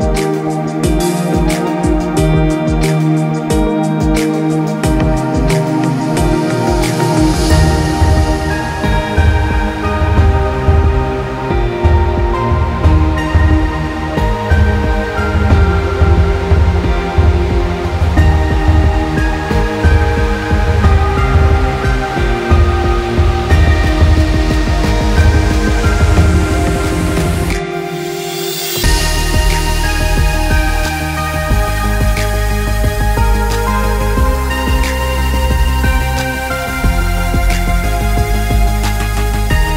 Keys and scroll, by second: 2.9 ctrl+z, 32.2 ctrl+z.